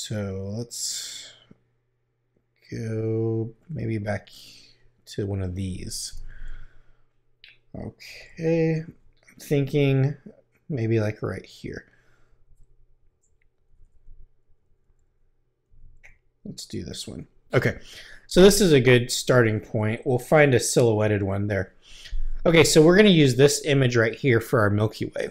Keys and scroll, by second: 6.0 Return, 8.0 Right, 9.4 Left, 12.3 Left, 12.5 Right, 16.9 Right, 20.4 Right.